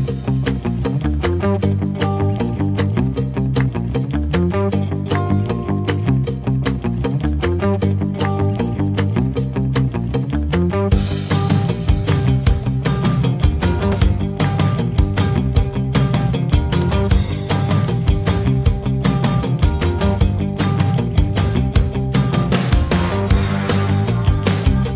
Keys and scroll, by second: 14.8 Caps_Lock, 15.4 s, 15.8 t, 15.9 a, 16.3 t, 16.5 Return, 17.4 n, 17.5 w, 17.6 space.